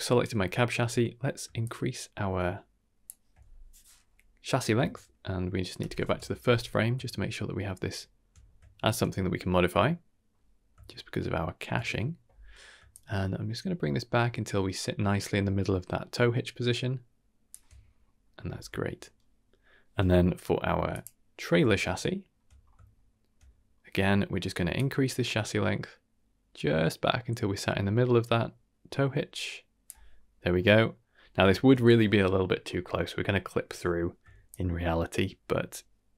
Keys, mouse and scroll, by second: 1.6-3.0 shift+drag, 5.8 shift+Left, 6.8-7.1 scroll down 2, 7.1-7.7 shift+middle drag, 7.9 shift+middle drag, 8.3 scroll up 3, 8.6 shift+scroll down 1, 8.7 shift+middle drag, 9.0-10.2 middle drag, 10.5-10.8 scroll up 2, 10.8 shift+scroll down 1, 10.8-11.6 shift+middle drag, 12.9-17.5 shift+drag, 17.9-18.8 scroll down 4, 18.8-19.1 shift+middle drag, 19.4-19.8 shift+middle drag, 20.9 click, 21.7-22.2 shift+middle drag, 22.5-22.9 scroll up 2, 22.9-23.2 shift+middle drag, 23.4 middle click, 24.7 click, 30.2 scroll down 1, 30.5-31.1 middle drag, 31.2 scroll down 2, 31.5 shift+middle click, 32.1 middle click, 32.6-33.0 middle drag, 34.4-36.1 shift+drag.